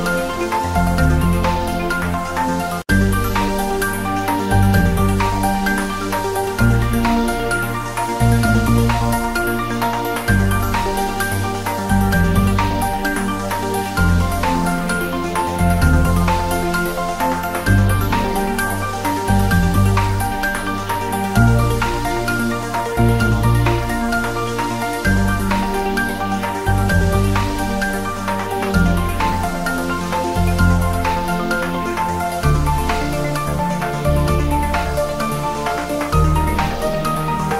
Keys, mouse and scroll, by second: 0.5-1.1 drag, 2.2-2.8 scroll up 1, 4.5 scroll down 1, 5.5 click, 6.0 scroll up 1, 9.7-10.4 scroll down 1, 12.4-12.7 scroll up 1, 13.1-14.1 drag, 14.8-15.4 scroll down 1, 15.4-15.7 click, 15.8 scroll up 1, 16.2-18.5 drag, 19.5 Tab, 19.8-20.4 scroll down 1, 20.5-20.9 click, 20.9-21.5 scroll down 1, 21.6 click, 22.3 scroll up 1, 22.7-23.6 typing, 23.7 scroll up 1, 24.4-25.7 drag, 25.9 scroll down 1, 26.1 click, 26.6 scroll down 1, 28.0-30.4 drag, 30.6-31.1 scroll down 1, 31.1 click, 33.3 click, 36.1-36.7 click.